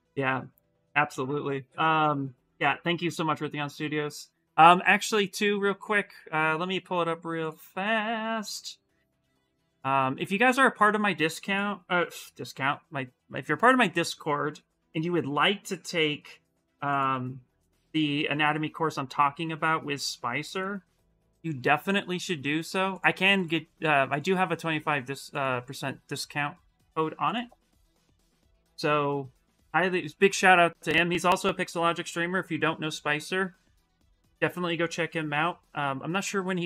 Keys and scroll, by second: 27.9 ctrl+v.